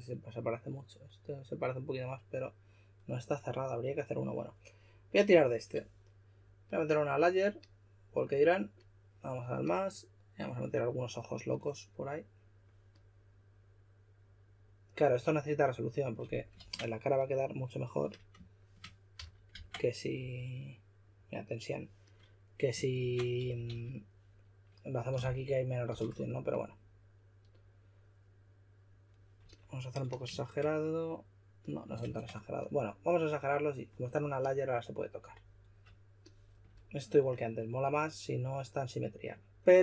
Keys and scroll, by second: 16.6 super+z, 19.1 s, 19.5 super+z, 20.1 x, 22.9 super+z, 23.2-24.1 typing, 25.2-25.8 typing, 32.0 super+z.